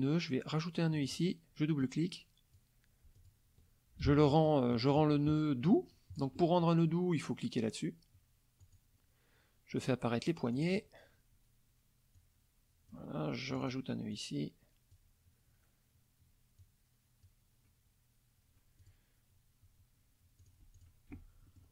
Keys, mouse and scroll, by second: 1.0 click, 1.8 click, 3.2 ctrl+click, 4.0 ctrl+z, 4.3 ctrl+click, 4.7 ctrl+click, 5.7 click, 8.6 click, 10.5 click, 12.2 click, 13.5 click, 14.1 click, 16.6 click, 18.8 click, 20.4 click, 20.8 click, 21.2 F1, 21.5 middle click.